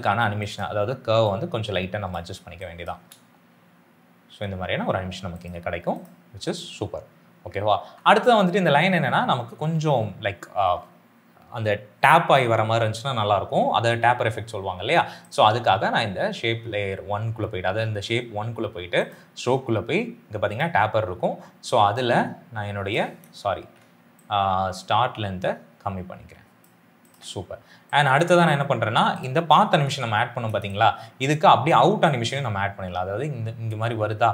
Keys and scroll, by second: 2.8 space, 7.9 space, 23.5 ctrl+z, 29.8 u.